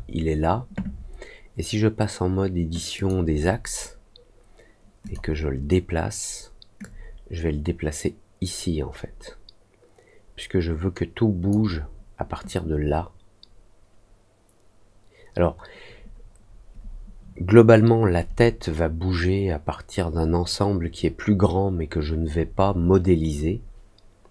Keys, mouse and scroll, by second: 2.9 click, 5.0 click, 6.7-11.4 drag.